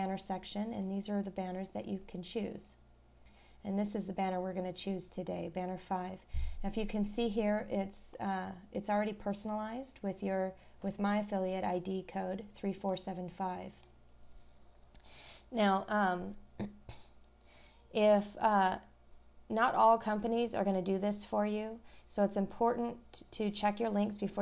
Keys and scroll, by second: 0.8 scroll up 1, 1.4 scroll down 1.